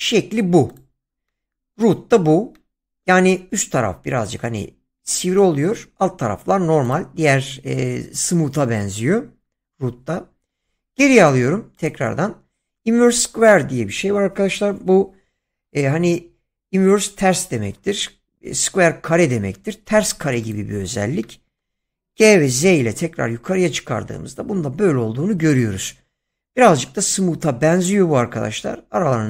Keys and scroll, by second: 10.5 ctrl+z, 22.1 g, 22.7 z.